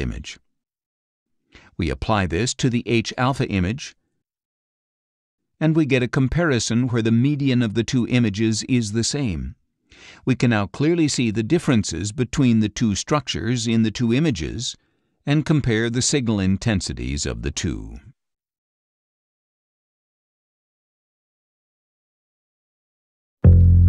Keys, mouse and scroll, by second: 2.1-4.1 drag, 5.9 ctrl+shift+z, 8.0 ctrl+shift+z, 8.8 ctrl+shift+z, 17.0-17.6 scroll down 4, 18.6 ctrl+shift+z.